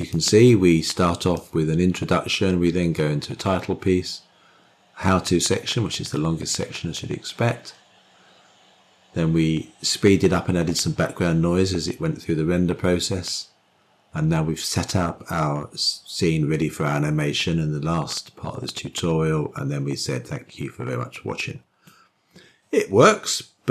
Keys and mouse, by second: 0.8 click, 2.1-22.7 drag.